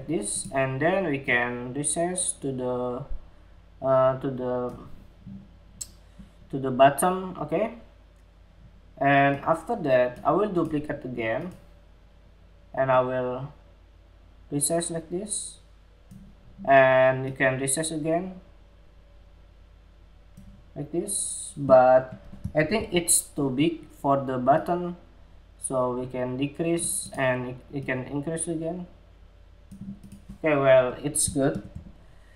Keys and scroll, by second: 22.1 super+=, 31.0 super+-.